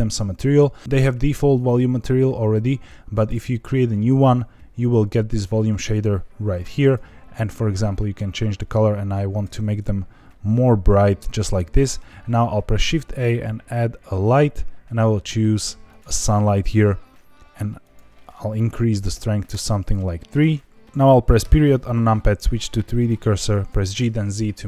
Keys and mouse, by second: 3.1 click, 4.8 click, 12.1 shift+a, 17.8-20.0 drag, 23.6 ., 23.6 g, 23.9 z.